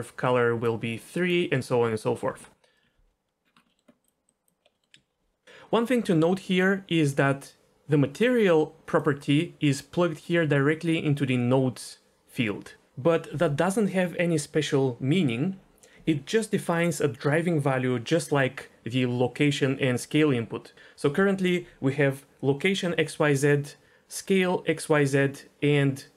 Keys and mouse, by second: 0.0-2.7 typing, 1.0-1.3 drag, 2.4 right click, 3.6 middle click, 4.0 click, 4.2 click, 4.8 middle click, 7.6-9.0 drag.